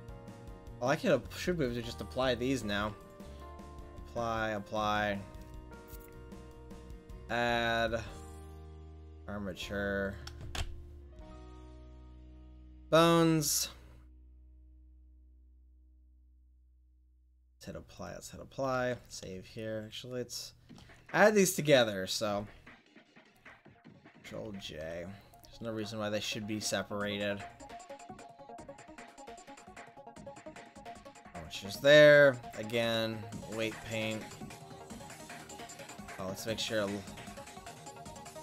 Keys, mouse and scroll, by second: 2.7 ctrl+s, 10.6 click, 13.2-15.4 drag, 18.0 click, 18.7 ctrl+s, 24.5 ctrl+j, 27.8 ctrl+s, 32.4 ctrl+j, 33.4 click, 34.5-35.7 drag, 36.3-38.4 drag.